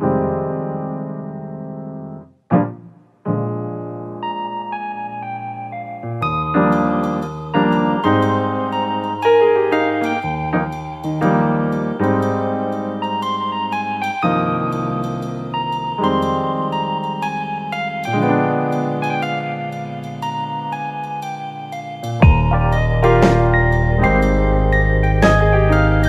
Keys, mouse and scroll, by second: 0.2 shift+click, 0.8 shift+click, 1.9 shift+click, 3.1 f, 3.5-4.6 middle drag, 4.6 Tab, 5.4-6.5 middle drag, 6.5 /, 7.0-7.7 middle drag, 7.7 click, 8.4 Tab, 9.2 Tab, 9.5 click, 10.0 Tab, 10.4-11.5 middle drag, 11.5 click, 12.6 click, 15.8 ctrl+r, 17.9 click, 18.3 shift+click, 19.1 middle click, 19.7 shift+click, 20.2-22.6 shift+drag, 22.6-24.8 middle drag, 24.8 click, 25.6 alt+shift+click.